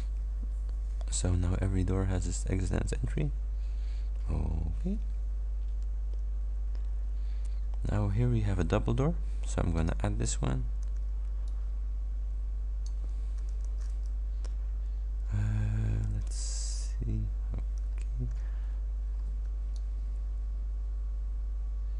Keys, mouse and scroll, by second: 9.8 click, 10.8 ctrl+d, 11.5-13.1 ctrl+drag, 13.6 ctrl+d, 16.6 v, 17.9-19.4 ctrl+scroll up 7, 19.8-21.9 ctrl+drag.